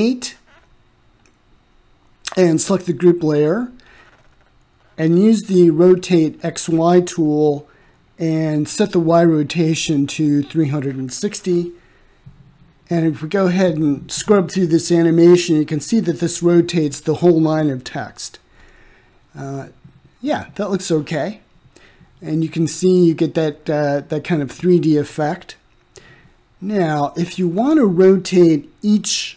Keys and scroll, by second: 7.2 3, 8.0 6, 9.2 Return.